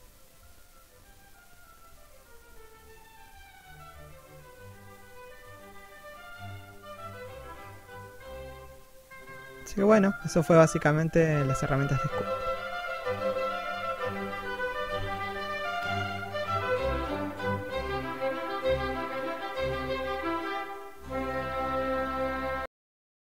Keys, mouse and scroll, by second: 0.7-1.1 scroll up 1, 1.1 middle click, 3.2-3.7 scroll up 1, 3.7 shift+middle click, 4.2-4.7 scroll down 1, 4.7 1, 5.3 shift+middle click, 6.5 click, 8.5 click, 10.4 click, 12.7 click, 15.1 click, 17.9 scroll down 1, 18.7 scroll up 1, 19.0 shift+middle click.